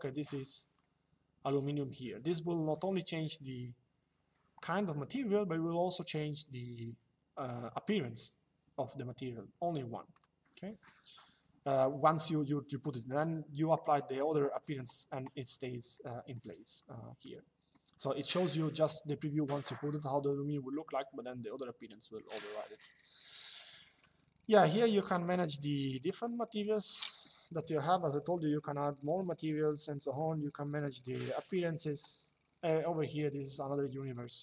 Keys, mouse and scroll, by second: 9.9 click, 16.5 middle click, 22.1 click, 24.4 click, 25.9 click, 28.0 click, 30.8 click, 32.5 click, 33.8 click.